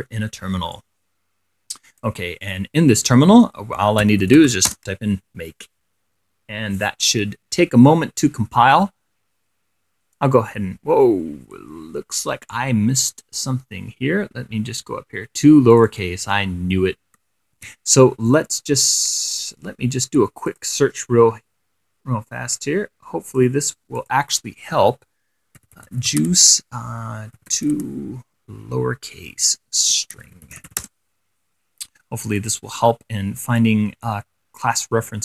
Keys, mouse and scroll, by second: 1.0-2.5 drag, 2.7 click, 4.0-5.2 typing, 13.2-14.6 scroll up 2, 15.9 click, 17.8 ctrl+c, 20.7 click, 22.8 click, 24.2-24.5 scroll up 2, 25.6-28.2 typing, 29.8-31.4 typing, 32.6-33.8 drag.